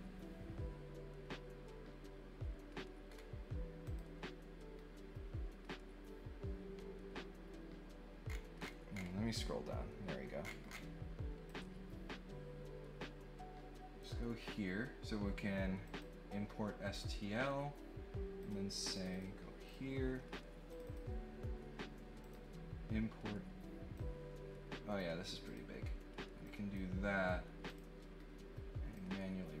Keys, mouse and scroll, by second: 3.1 scroll up 1, 3.8 click, 8.2-9.0 scroll down 4, 10.4-10.7 scroll down 2, 11.4-14.0 drag, 15.8 click, 16.9 click, 18.4 click, 18.9 click, 19.1 click, 19.6 click, 20.7 click, 20.8 click, 22.2 click, 23.9-24.9 drag, 25.4 click, 26.4 click, 27.6 click, 28.9-29.6 drag.